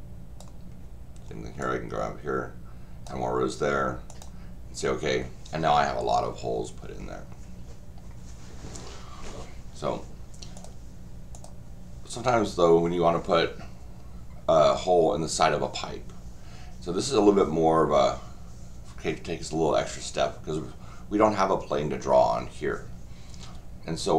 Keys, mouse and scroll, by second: 1.6-3.0 drag, 4.1 click, 10.5 click, 11.3 click.